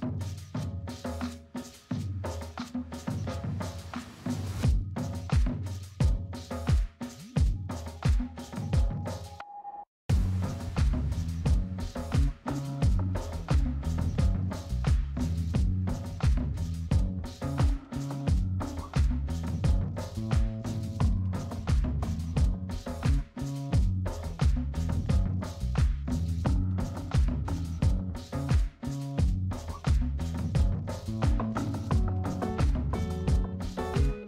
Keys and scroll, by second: 13.2 ctrl+z, 17.9 ctrl+z, 20.8 space, 30.2 space, 32.9 ctrl+0, 34.0 space.